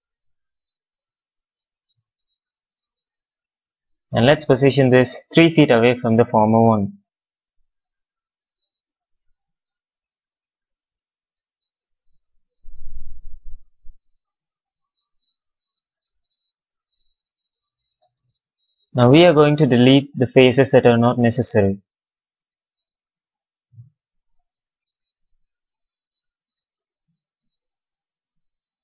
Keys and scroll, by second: 5.5 x, 9.4 x, 15.8 space, 17.3 q, 20.3 a, 22.6 Delete.